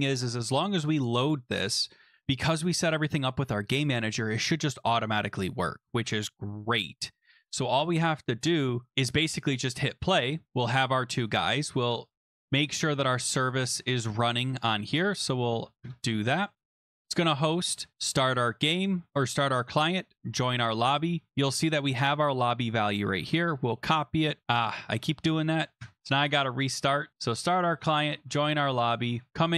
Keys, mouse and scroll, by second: 0.1 click, 3.7-5.2 drag, 9.1-9.6 drag, 10.5 click, 11.3 click, 13.6 click, 14.1 click, 15.8 Return, 16.5 Up, 17.2 click, 17.9 click, 20.2 click, 20.9 click, 21.7 click, 21.9 click, 22.3 click, 22.4 click, 23.2 ctrl+c, 25.8 Return, 26.8 click, 27.2 click, 28.0 click, 28.9 click, 29.3 click.